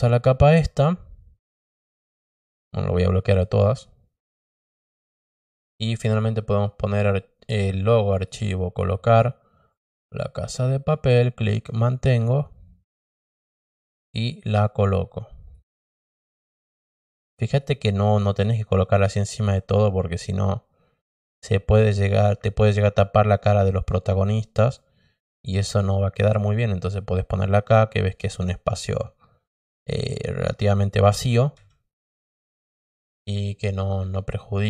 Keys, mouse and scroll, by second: 2.7 click, 5.5 click, 8.1 click, 9.7 click, 9.9 click, 11.1-12.3 drag, 13.9-15.5 drag, 15.9 click, 16.9-17.5 drag, 18.0-18.3 drag, 18.8-20.0 drag, 20.3 click, 22.9-24.2 drag, 24.7-26.9 drag, 28.9-30.1 drag, 33.6 click, 34.5 click.